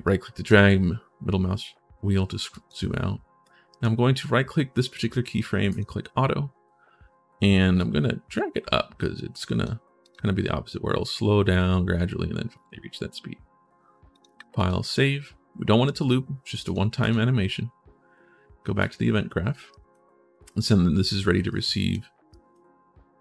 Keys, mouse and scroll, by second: 2.3 click, 3.5 right click, 5.4 click, 7.6-9.4 drag, 9.8 click, 13.9 click, 14.4 click, 16.4 click, 16.8 click, 18.6 click, 19.5 right click, 20.3 click, 21.2 right click, 22.1 right click.